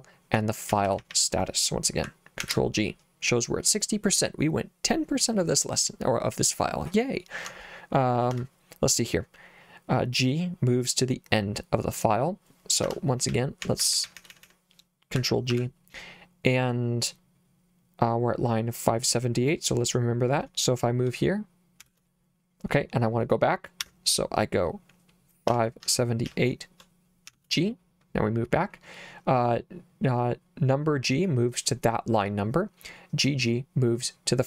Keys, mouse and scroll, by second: 0.7 k, 0.9 k, 1.0 k, 1.2 k, 2.4 ctrl+g, 8.4 Escape, 12.9 Escape, 13.1-15.0 typing, 15.6 ctrl+g, 21.9 shift+g, 23.9 Escape, 25.3-27.3 typing.